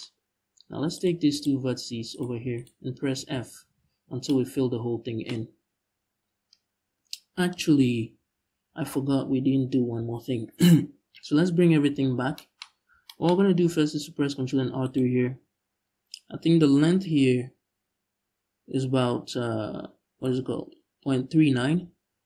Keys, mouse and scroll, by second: 0.6 click, 1.0 click, 1.8-2.8 right drag, 2.8 f, 3.5 scroll down 2, 3.7 Tab, 7.2 ctrl+z, 12.3-12.7 scroll up 2, 13.6 ctrl+r.